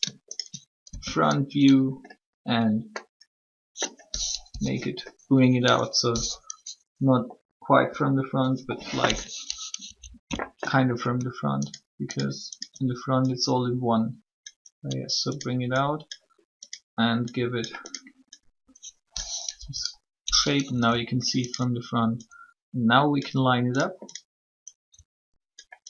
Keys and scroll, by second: 4.5 1, 7.8 6, 19.4 1.